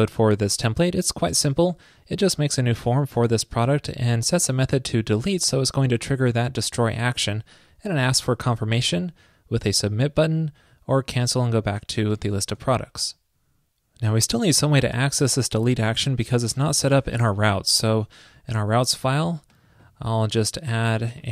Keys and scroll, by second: 12.7 super+s.